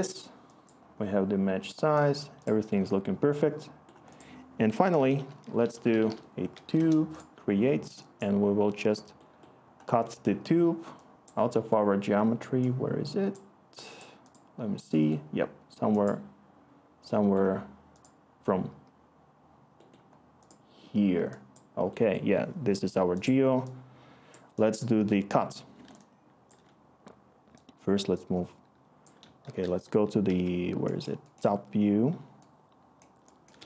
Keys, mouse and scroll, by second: 4.5 Tab, 5.4-6.5 typing, 6.7 Return, 29.4-30.2 typing.